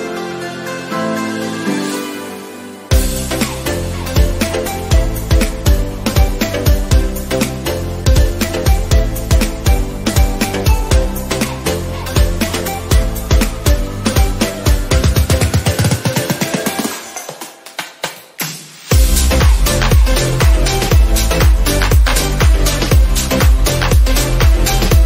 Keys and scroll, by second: 24.5 ctrl+d.